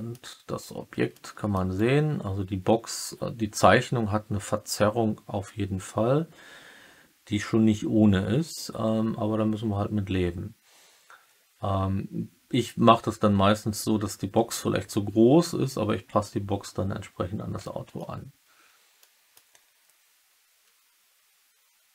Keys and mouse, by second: 1.1-1.5 middle drag, 17.5-17.9 middle drag, 18.9-19.3 middle drag.